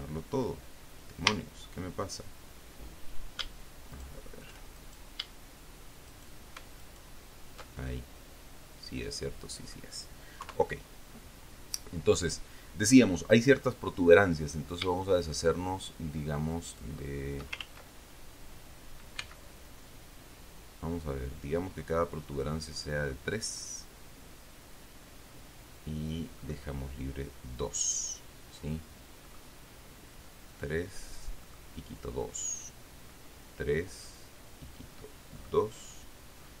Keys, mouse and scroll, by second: 1.6 a, 4.3 alt+shift+right click, 5.1 alt+shift+right click, 6.4 shift+right click, 7.1 alt+shift+right click, 8.2-10.2 alt+shift+middle drag, 10.8 KP_3, 17.0 shift+right click, 18.0 ctrl+shift+z, 19.5 c, 22.7 click, 26.7 click, 29.6 click, 31.8 click, 35.7 click.